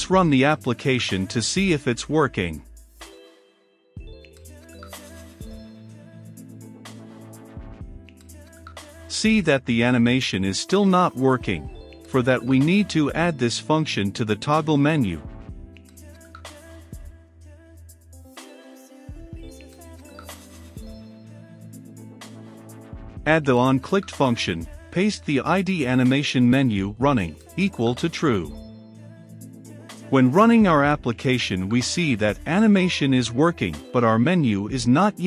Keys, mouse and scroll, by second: 0.0-13.4 drag, 13.4-14.6 right drag, 14.6-21.3 drag, 21.3 Tab, 23.1-24.9 typing, 25.9 ctrl+v, 26.4 click, 27.0-30.3 typing, 30.5-35.2 drag.